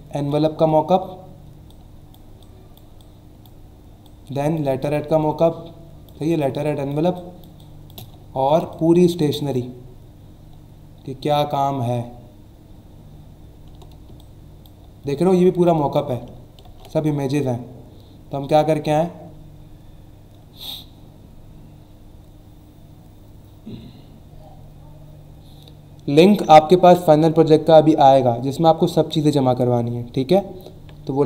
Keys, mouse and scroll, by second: 1.4 space, 1.7 click, 2.0 space, 2.4 click, 2.5 space, 3.0 click, 3.1 space, 4.0 click, 4.2 space, 4.8 click, 4.9 space, 7.6 click, 7.7 space, 8.2 alt+scroll down 1, 8.6 space, 8.7 click, 9.1 space, 12.1 alt+scroll up 1, 12.9 alt+scroll down 1, 13.4 alt+scroll down 1, 14.0 space, 14.1 click, 14.5 space, 15.6 click, 16.6 ctrl+z.